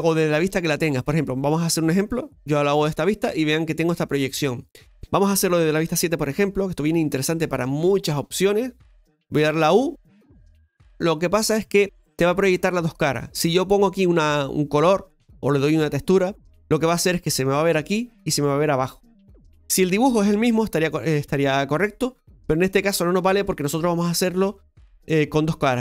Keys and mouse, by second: 6.9 shift+KP_7, 6.9-10.7 middle drag, 18.1 middle click, 19.9-22.3 middle drag.